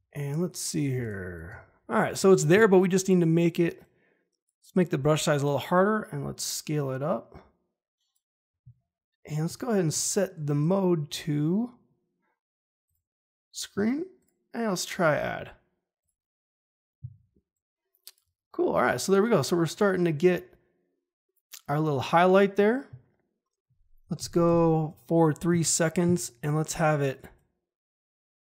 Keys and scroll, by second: 0.9 space, 9.8 F4, 24.1 shift+Page_Down.